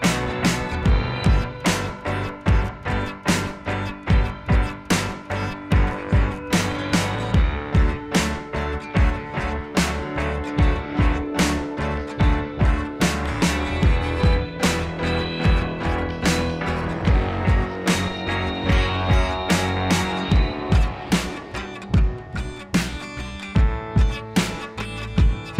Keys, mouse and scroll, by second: 0.0-1.5 typing, 4.7 space, 4.8 click, 5.2 [, 8.8 space, 8.9 click, 9.2 ], 9.3 ], 9.4 ], 11.7 click, 12.1 ], 16.4 ], 16.5 ], 20.8 [, 20.9 [, 21.4 [, 22.6-23.0 typing, 22.7 click, 24.8 ], 24.9 ].